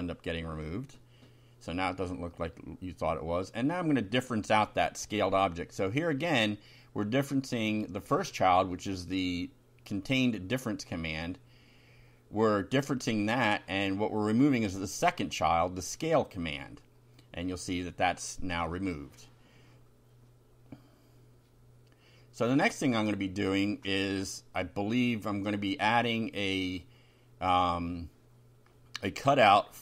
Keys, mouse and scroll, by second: 1.0 Up, 2.6 Up, 4.0 Down, 4.4 Return, 5.2-9.1 typing, 9.6 shift+Down, 10.0 shift+Home, 10.4 shift+Down, 13.0 shift+Down, 13.6 Tab, 14.2 End, 15.4 shift+], 16.3 F5, 18.2 ctrl+r, 19.2 click, 20.2 click, 21.5 ctrl+c, 22.0 ctrl+click, 22.8 Return, 23.3 ctrl+v, 24.9 click, 26.2 0, 28.0 Delete, 28.5 click, 29.6 Left.